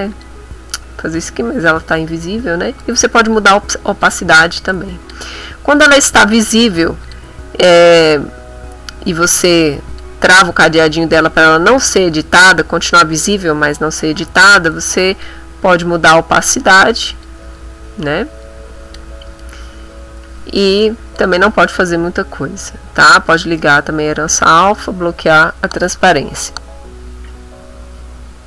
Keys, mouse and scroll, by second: 0.1 click, 2.8-4.2 drag, 4.7 click, 5.8 click, 7.0 click, 9.9 click, 14.7 click, 16.0 click, 16.8 click, 17.5 click, 18.4 click, 20.8 click, 22.6 click, 23.0 click.